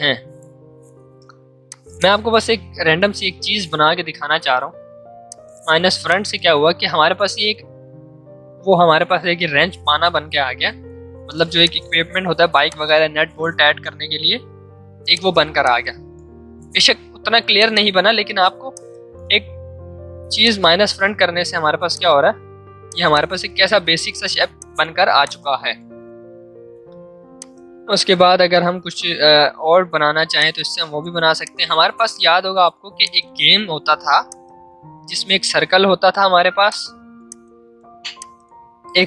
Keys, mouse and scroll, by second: 9.6 click, 9.7 ctrl+z, 11.2 ctrl+shift+z, 11.5 shift+click, 11.6 shift+click, 15.1 shift+click, 16.5 ctrl+shift+z, 17.5-27.3 drag, 27.3 alt+click, 28.6 ctrl+z, 30.3-32.9 shift+drag, 33.5 l, 34.2-36.2 shift+drag, 36.2 v, 36.7-39.0 drag.